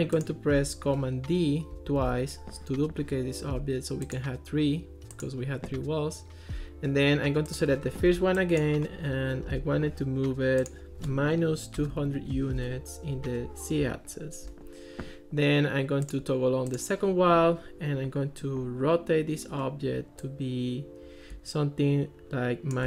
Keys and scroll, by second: 1.8 super+d, 11.3-12.5 typing, 12.6 Return.